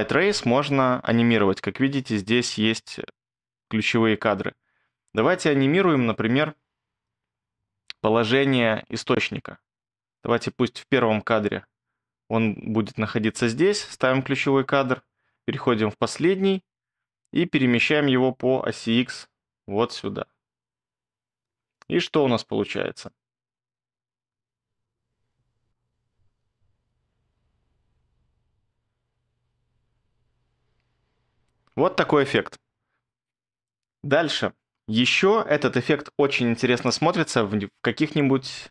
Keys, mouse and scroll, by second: 26.2 space.